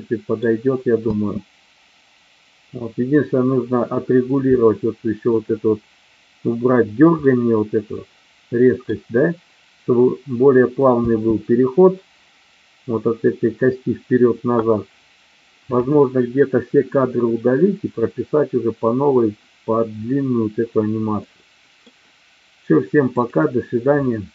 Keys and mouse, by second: 1.0 space, 4.5 middle click, 7.2-8.8 middle drag, 11.0 space, 21.2 middle click, 23.2 click.